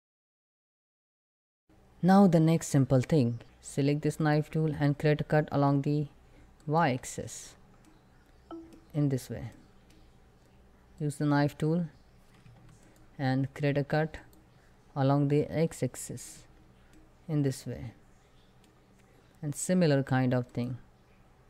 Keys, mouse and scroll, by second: 1.1 scroll up 1, 1.3 click, 2.2 1, 2.7 scroll up 1, 3.9 click, 5.4 y, 6.2 click, 6.7 space, 7.2 scroll down 1, 7.5 middle click, 8.5 scroll up 1, 9.2 shift+middle click, 10.6 click.